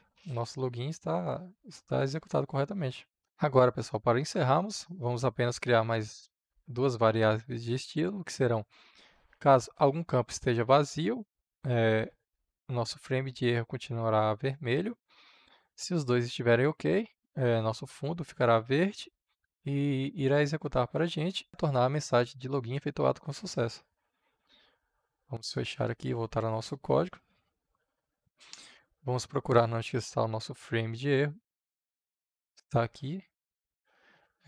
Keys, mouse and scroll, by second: 32.0-34.4 drag.